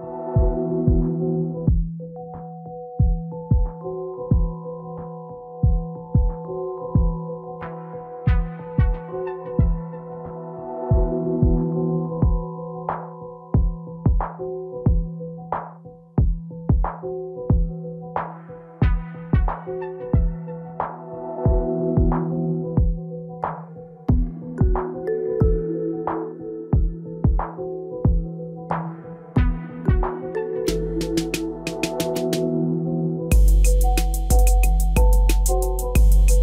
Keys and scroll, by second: 2.1 F4, 10.7 ctrl+a.